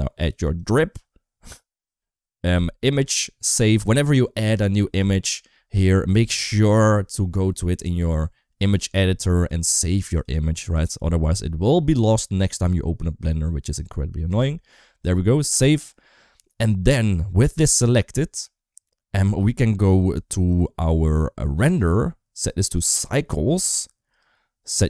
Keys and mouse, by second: 1.4 middle click, 2.1 middle click, 2.6-4.4 drag, 8.0-8.8 drag, 9.2-10.1 drag, 16.1 middle click, 21.4 click, 22.4 click, 23.4 click.